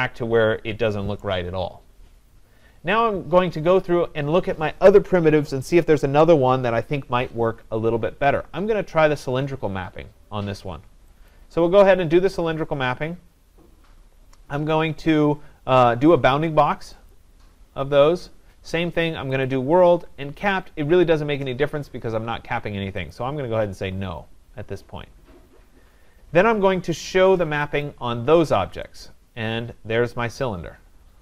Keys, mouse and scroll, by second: 1.3 right click, 2.5 scroll, 3.7 scroll, 7.5 middle click, 11.3 click, 17.1 click, 19.5 click, 23.1 click, 27.8 click.